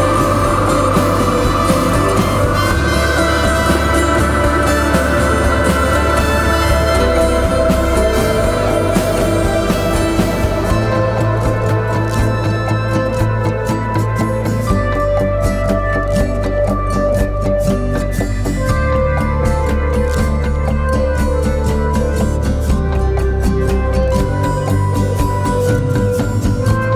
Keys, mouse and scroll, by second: 12.1 double click.